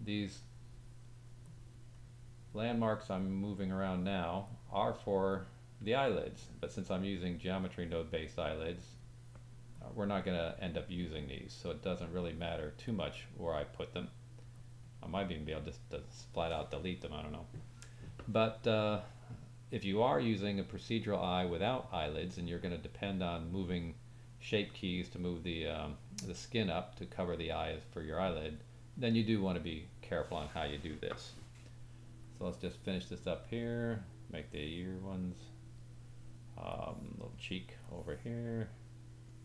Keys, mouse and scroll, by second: 32.3 click, 34.4 click, 37.9 click.